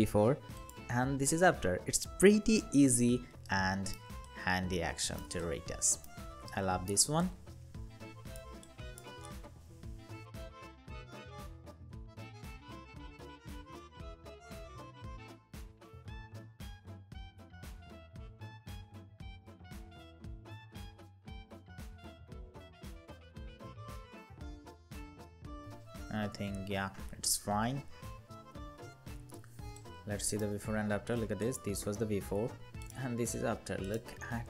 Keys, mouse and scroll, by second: 3.2 alt+right click, 6.2 alt+right click, 12.4 space, 15.3 space, 18.4 space, 19.7 alt+scroll up 1, 20.0 alt+scroll down 1, 21.8 space, 22.7 alt+right click, 25.8 ctrl+0, 26.9 ctrl+=, 27.2 ctrl+=, 27.4 ctrl+=, 27.8 ctrl+=, 28.2 ctrl+=, 28.6 ctrl+=, 29.2 space.